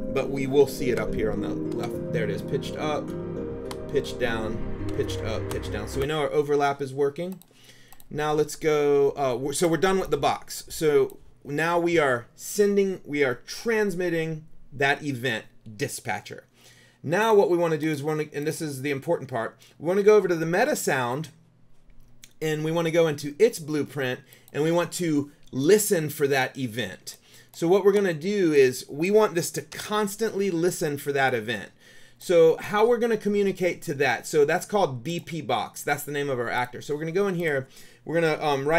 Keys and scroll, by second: 0.8 Right, 1.4 Up, 3.3 Down, 4.2 Up, 5.2 Down, 6.1 Escape, 29.9 BackSpace.